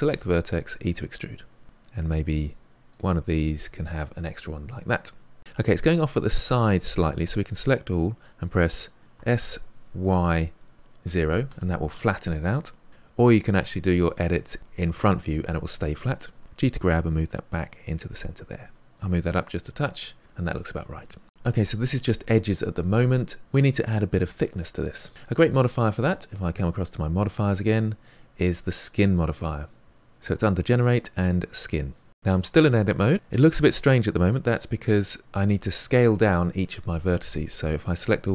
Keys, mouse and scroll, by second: 1.5 middle click, 1.6-2.7 scroll up 2, 2.7 click, 2.9 e, 4.9-6.5 middle drag, 6.5 click, 9.1 s, 16.4 g, 18.7 middle click, 19.7 g, 27.2 click, 37.9 a.